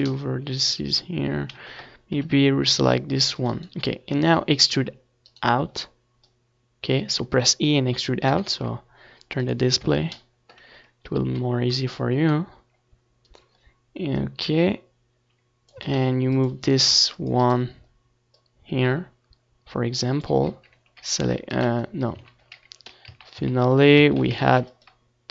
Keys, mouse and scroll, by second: 0.1 n, 0.3-2.8 middle drag, 1.5 KP_7, 3.9-5.2 drag, 5.2 a, 5.4 c, 7.0-8.4 right drag, 7.7-8.9 drag, 9.5 ctrl+r, 9.5 a, 10.8 ctrl+z, 10.8 right click, 11.5 ctrl+z, 11.9 ctrl+z, 12.3 a, 12.7 ctrl+r, 13.7-15.1 drag, 14.0 a, 14.3 space, 15.1 ctrl+r, 15.7-17.5 right drag, 15.8 a, 15.9 c, 17.7 right click, 18.2 click, 19.2-20.3 drag, 20.9 Tab, 21.3-23.4 middle drag, 21.5 z, 21.8 ctrl+s, 23.4 ctrl+s.